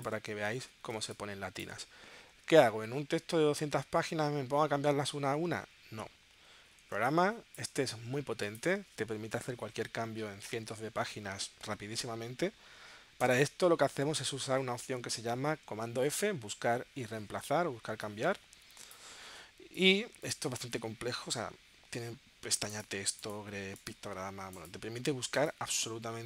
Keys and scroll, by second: 1.0 space, 1.7 space, 6.9 space, 16.4 super+f.